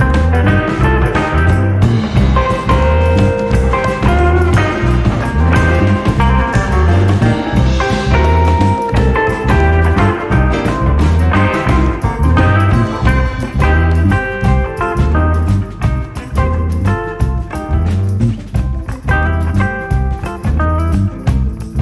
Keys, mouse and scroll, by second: 0.3 click, 4.7-7.7 middle drag, 7.7 click.